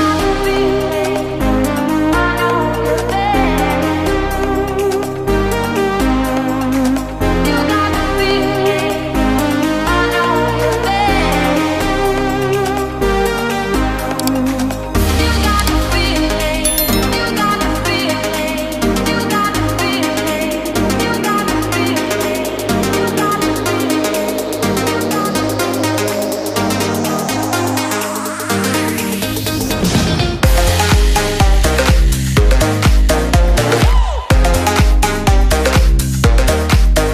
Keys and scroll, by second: 0.6 ctrl+z, 1.0 ctrl+space, 5.9 ctrl+space, 22.9 ctrl+space, 23.4 ctrl+space, 27.9 ctrl+c, 28.3 ctrl+f, 32.6 ctrl+space.